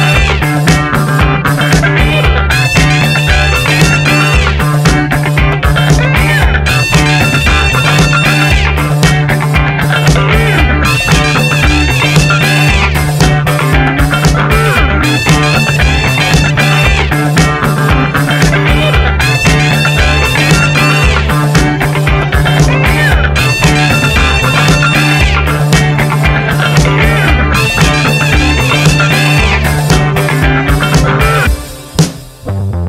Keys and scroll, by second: 4.9-5.8 typing, 6.0 Return, 11.1-12.0 typing, 12.1 Return, 13.9 v, 14.0 Right, 14.9 Down, 15.7 Right, 16.0 Left, 22.2 ctrl+t, 24.9 Return, 25.2 Down, 25.3 Right, 25.7 Down, 26.5 Left, 26.8 Right, 27.0 Down, 30.3 Right, 30.4 Down, 30.5 Right, 30.7 Down, 31.0 Right, 31.5 Up, 31.6 Right, 32.4 Up, 32.7 Down.